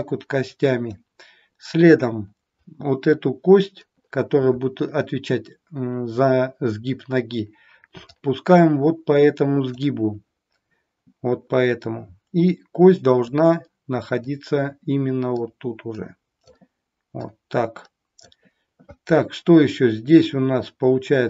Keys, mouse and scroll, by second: 8.1 click, 13.3 click, 15.3 click.